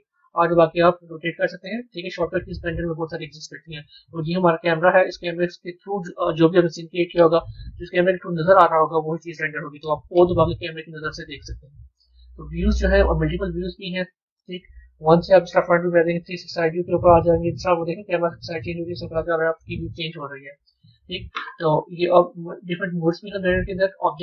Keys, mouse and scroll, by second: 4.1 click, 12.0 KP_0, 13.2-14.9 middle drag, 14.9 KP_1, 20.5-23.6 middle drag, 23.6 click.